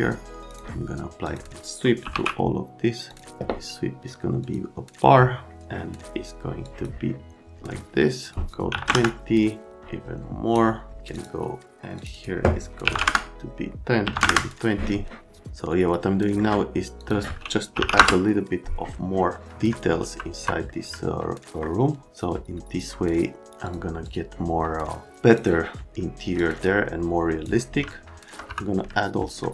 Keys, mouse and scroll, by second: 0.5 click, 1.3 click, 1.7-2.6 typing, 3.1 click, 4.4 click, 6.7 click, 8.2 click, 8.7 KP_1, 8.8 KP_0, 8.8 KP_Enter, 9.8 click, 11.1 click, 12.0 click, 12.1 click, 12.8 KP_1, 12.9 KP_0, 12.9 KP_Enter, 14.0 KP_1, 14.1 KP_0, 14.2 KP_Enter, 15.4 alt+middle click, 17.0 click, 17.5-18.3 typing, 19.4 middle click, 20.0 F3, 20.4 F3, 21.1 alt+right click, 22.1 alt+right click, 22.9 middle click, 23.6 click, 24.0 click, 25.3 click, 26.3 click, 27.9 alt+middle click, 28.4 F3, 28.9 alt+middle click.